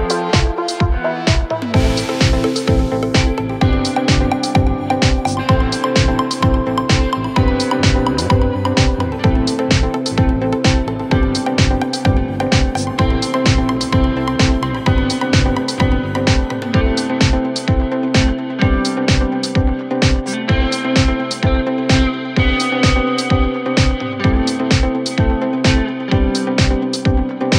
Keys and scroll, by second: 6.9 Escape, 9.4 ctrl+z, 11.4 shift+Page_Up, 11.6 Escape, 15.1 Escape, 17.1-18.9 typing, 27.0-27.5 typing.